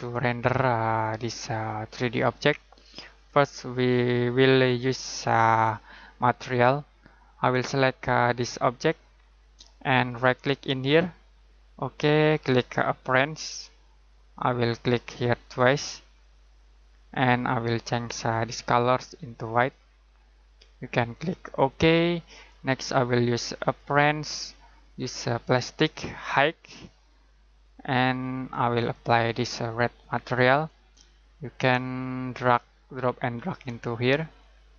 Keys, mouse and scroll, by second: 1.2 middle click, 8.2 click, 10.1 right click, 13.0 click, 15.5 click, 19.5 click.